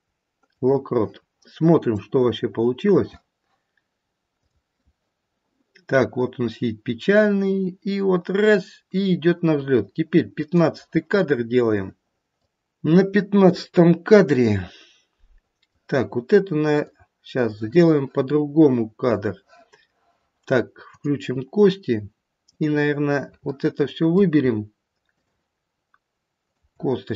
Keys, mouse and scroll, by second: 2.0 click, 4.5 click, 12.4 middle click, 15.3 middle click, 16.8 click, 20.9 click, 22.4 click, 23.4 middle click, 23.9 middle click, 25.1 shift+click.